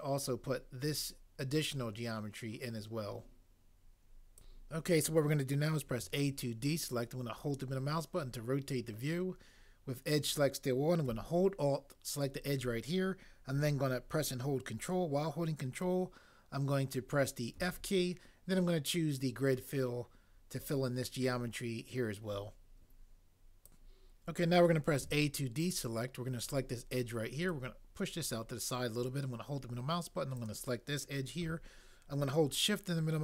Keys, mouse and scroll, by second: 5.9 a, 17.6 ctrl+f, 25.0 a.